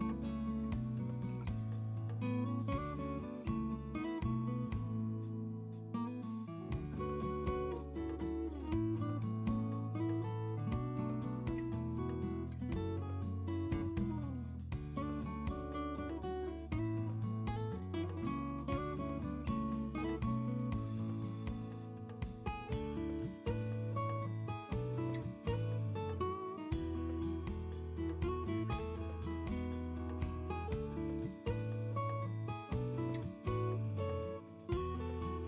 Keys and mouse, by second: 6.5 n, 6.6 KP_3, 6.8 a, 7.7 u, 9.4-11.0 drag, 11.8 r, 12.8 r, 13.7 click, 13.9 r, 14.3 r, 16.5 n, 18.5 ctrl+z, 20.0 click, 22.3 click, 25.6-27.3 drag, 27.3 r, 27.8 r, 30.1 KP_2, 31.1-35.4 drag.